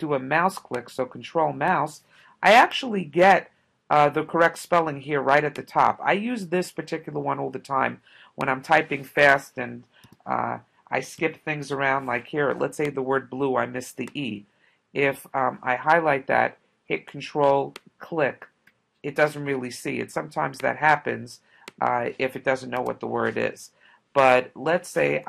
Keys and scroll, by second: 9.2 space, 10.1 b, 11.2 l, 11.7 u, 22.8 e.